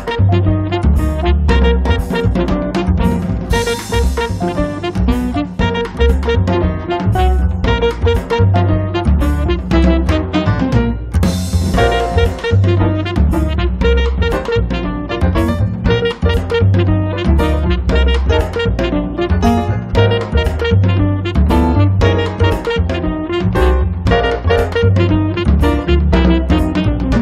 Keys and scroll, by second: 3.5 space, 17.5 5, 22.0 -, 22.5 5, 26.6 3.